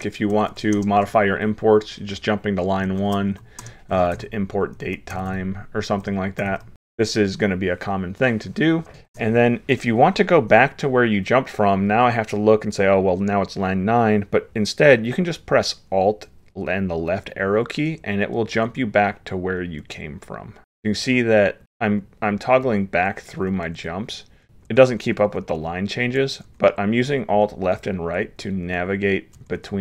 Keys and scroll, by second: 9.0 ctrl+s, 18.7 alt+Left, 19.8 alt+Left, 21.0 alt+Left, 23.5 alt+Right, 23.8 alt+Right, 24.4 alt+Left, 25.9 alt+Right, 26.5 alt+Left, 27.0 alt+Left, 27.8 alt+Left, 28.7 alt+Right, 29.0 alt+Right, 29.6 alt+Left.